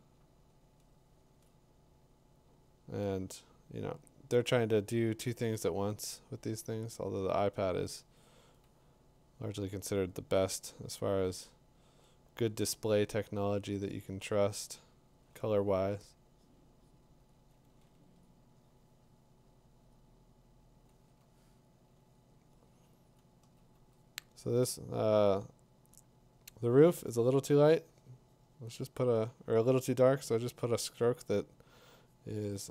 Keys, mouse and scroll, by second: 1.1 click, 3.1 click, 8.6 click, 10.1 click, 10.3 click, 12.1 click, 12.7 click, 16.7 ], 17.2 [, 18.2 click, 22.4 click, 23.1 click, 25.3 click, 27.5 click.